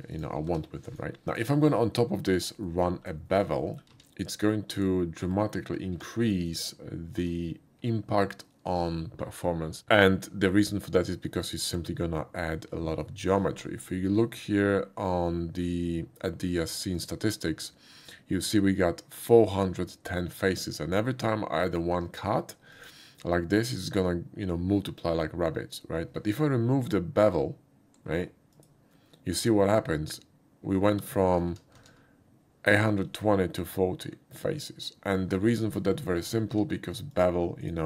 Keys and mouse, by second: 0.1 click, 0.5 g, 0.9 right click, 1.3 click, 2.7 middle click, 3.3 shift+middle click, 3.6 shift+middle click, 3.9 q, 4.7 click, 5.9 1, 6.5 click, 7.2 q, 9.5 alt+click, 14.6 right click, 17.0 click, 21.6-22.2 drag, 22.7 click, 28.5 click, 35.8 click, 36.8 q, 37.1 click.